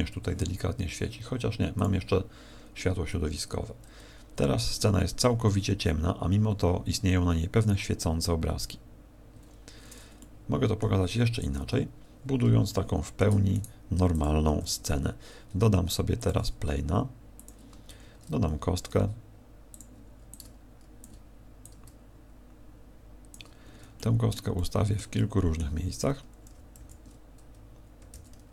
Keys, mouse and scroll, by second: 0.1 Escape, 1.7 click, 9.3 Escape, 10.1 middle click, 11.5 KP_1, 12.7 shift+middle click, 13.5 right click, 13.9 x, 14.6 shift+a, 16.7 s, 17.4 click, 17.9 shift+a, 20.3 click, 21.0 ctrl+click, 21.6 click, 23.5 scroll down 6, 23.9 middle click, 24.5 middle click, 25.1 middle click, 26.5 shift+d.